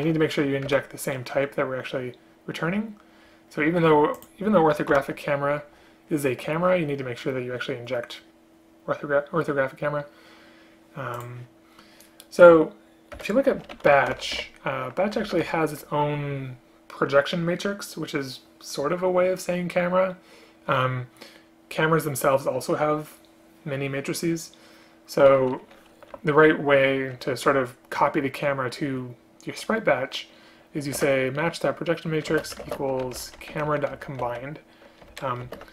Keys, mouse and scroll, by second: 0.8 Return, 5.0 ctrl+h, 13.2 Return, 31.0 Return, 32.4 space, 32.7 space, 35.2 ctrl+BackSpace, 35.5 ctrl+space.